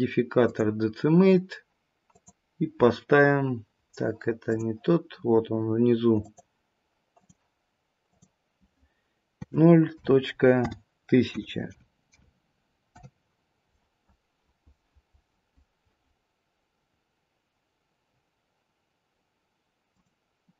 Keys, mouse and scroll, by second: 2.2 click, 5.0-6.2 scroll down 3, 6.2 click, 8.1 click, 19.8 click.